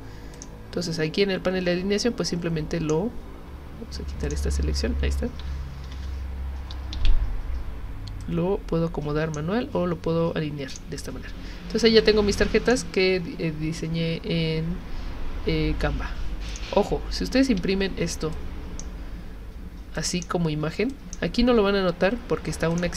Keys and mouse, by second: 0.4 click, 2.3-2.9 drag, 4.2 shift+click, 5.8 ctrl+g, 6.9 ctrl+z, 8.2-9.4 drag, 10.7 click, 12.7 click, 16.5 click, 17.6 z, 18.3 click, 20.0 click, 20.9 click.